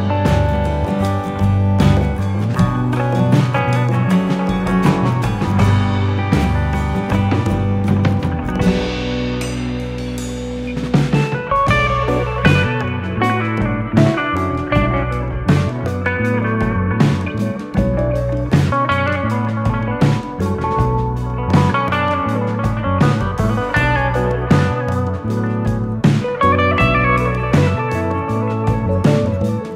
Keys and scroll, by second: 1.2 ctrl+d, 2.0 ctrl+], 2.4 ctrl+[, 4.3 p, 7.3 BackSpace, 15.0 ctrl+c, 16.9 ctrl+v, 24.6 u, 25.8 u, 26.5 u, 27.5 u.